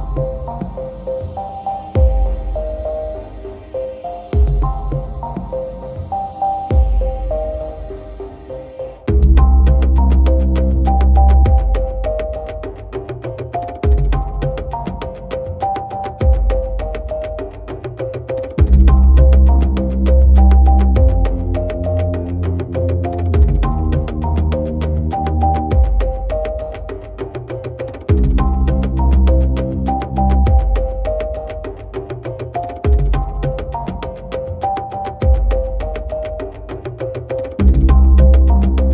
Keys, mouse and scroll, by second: 0.4 shift+click, 2.3 shift+c, 3.9 shift+click, 4.4 shift+click, 5.1 shift+click, 6.0 shift+drag, 7.7 click, 8.4 click, 9.1 click, 9.2-10.7 drag, 11.0 click, 11.5 click, 12.1 click, 12.2-13.3 drag, 14.0 click, 14.5 click, 15.0 click, 15.1-16.5 drag, 15.8 d, 16.8 click, 18.3 click, 19.6 click, 21.3 Tab, 22.6 h, 23.1 click, 23.5 Tab, 24.9 shift+click, 26.1 shift+click, 27.3 click, 27.8 click, 28.4 click, 29.1 click, 33.3 click, 33.9 click.